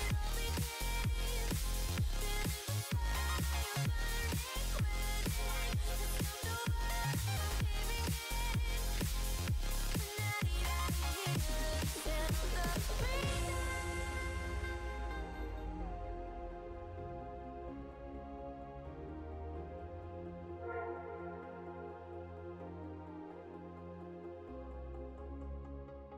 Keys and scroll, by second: 5.5 s.